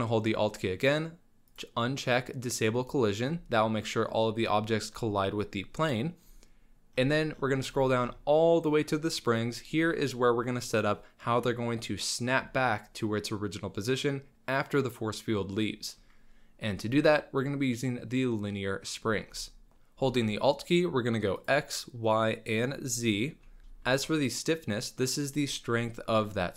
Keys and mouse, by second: 21.4 alt+drag, 22.1 alt+click, 22.9 alt+click.